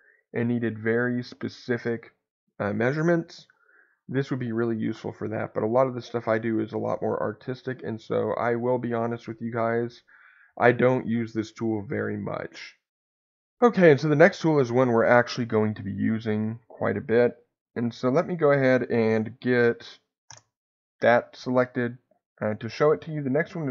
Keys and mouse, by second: 3.4 Delete, 5.3 click, 15.6 middle click, 20.2 ctrl+KP_Add.